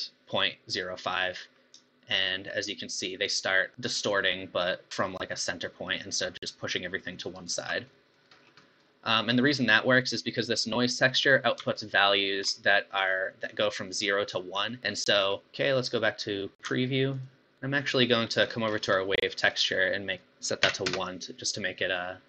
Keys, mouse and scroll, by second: 1.1-2.2 middle drag, 2.2-3.9 shift+drag, 7.9 middle click, 8.3 scroll up 5, 8.6-12.0 middle drag, 12.0 ctrl+shift+click, 14.9-17.2 middle drag, 17.2 ctrl+shift+click, 17.5 middle click, 18.5-19.0 scroll up 10, 19.0 middle click, 19.5-19.8 scroll up 2, 20.1-21.9 drag, 21.9-22.2 middle drag.